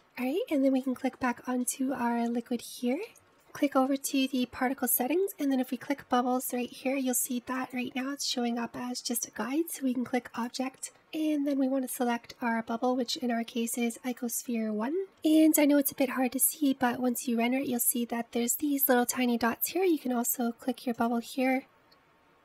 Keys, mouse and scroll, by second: 0.6 scroll up 3, 1.1-2.0 scroll down 2, 2.0 click, 2.4-2.7 shift+middle drag, 2.7-3.2 scroll up 3, 4.5 click, 7.1 click, 8.7-10.9 drag, 12.0-15.0 drag, 17.0-17.6 scroll up 3.